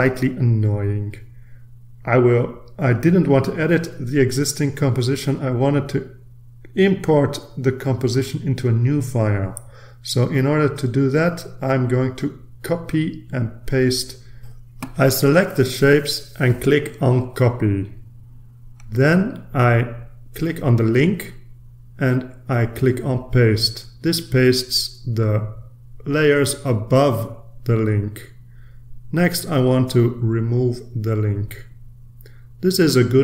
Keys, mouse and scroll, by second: 12.7 click, 13.7-14.6 scroll down 2, 16.4 shift+click, 21.2 click, 22.9 click, 24.9 click, 28.7-29.8 scroll up 1, 29.8-31.3 middle drag, 31.3 click.